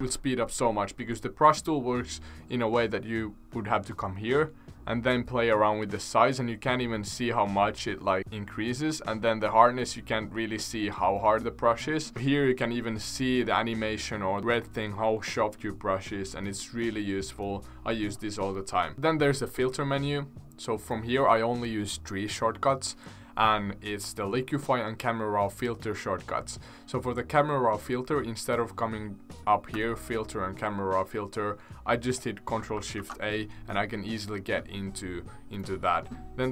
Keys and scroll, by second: 0.0 c, 32.9 ctrl+shift+a.